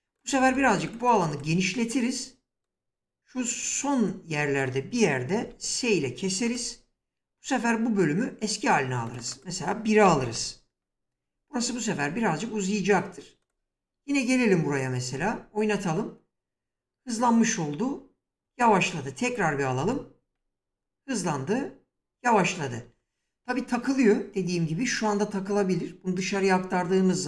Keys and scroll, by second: 5.3 s, 9.9 1, 10.1 Return, 15.0 space, 18.3 space, 22.7 space.